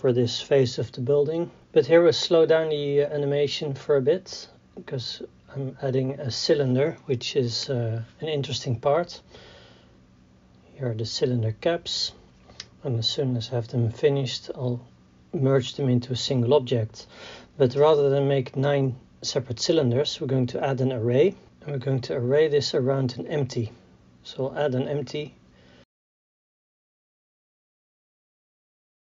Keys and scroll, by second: 0.0-3.2 typing, 1.1 Tab, 1.5 Tab, 1.6 Tab, 2.5 Tab, 4.3-10.1 typing, 6.6 Tab, 6.7 Tab, 8.9 Tab, 10.4 Tab, 12.2 ctrl+j, 12.3 KP_3, 13.5 KP_1.